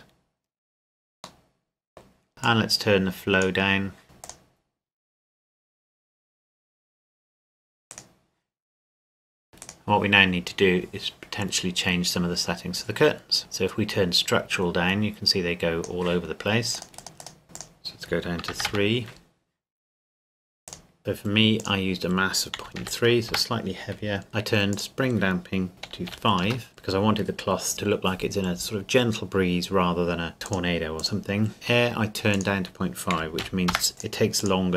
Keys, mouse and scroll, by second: 1.3-1.7 scroll up 1, 2.3 middle click, 2.4 click, 7.9 right click, 9.6 right click, 13.4 click, 17.5 click, 18.5 KP_3, 18.7 KP_Enter, 20.7 click, 21.6 click, 22.5 KP_Decimal, 22.8 KP_3, 23.3 KP_Enter, 24.7 click, 26.1 KP_5, 26.5 KP_Enter, 31.1 click, 32.7 click, 33.1 KP_Decimal, 33.4 KP_5, 33.7 KP_Enter, 33.9 click.